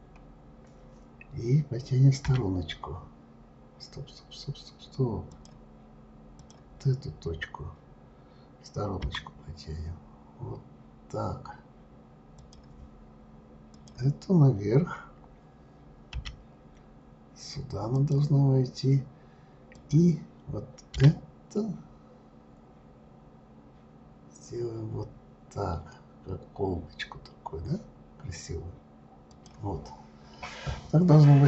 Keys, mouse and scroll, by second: 0.0-0.9 scroll up 3, 2.2 g, 6.4 click, 9.0 g, 13.7 click, 16.1 g, 19.7 click, 20.9 g.